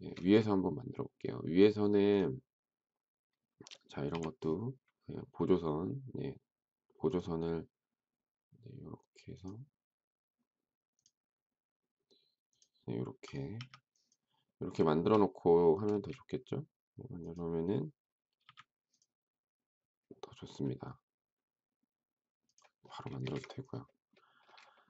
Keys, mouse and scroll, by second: 0.0 shift+double middle click, 0.2 space, 4.1 t, 13.5 e, 14.8 shift+middle click, 15.9 space, 18.4 m, 23.1 space, 23.2 Escape, 24.7 shift+middle click.